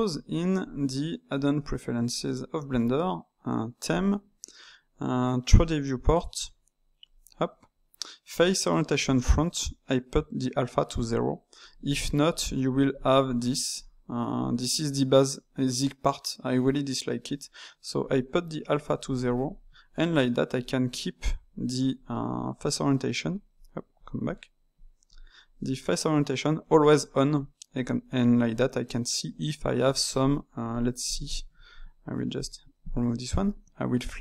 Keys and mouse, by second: 19.9-21.9 middle drag, 21.9 click, 23.2-23.6 drag, 23.9-24.2 drag, 25.0-27.0 drag, 27.0-29.7 middle drag, 29.7 Tab, 30.1 click, 31.0 shift+click, 32.4 click, 34.0 click.